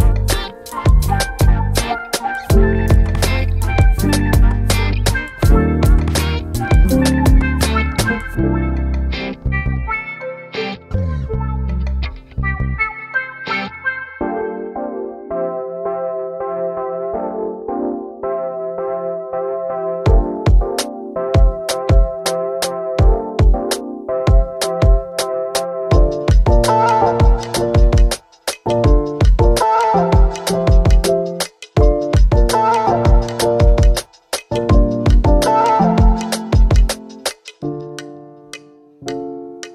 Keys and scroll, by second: 33.9-35.4 typing, 37.4-38.5 typing.